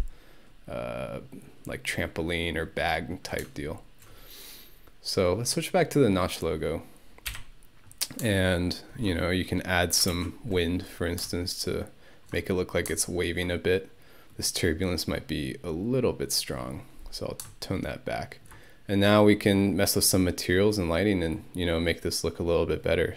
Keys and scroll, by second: 7.3 Home, 10.1 ctrl+1.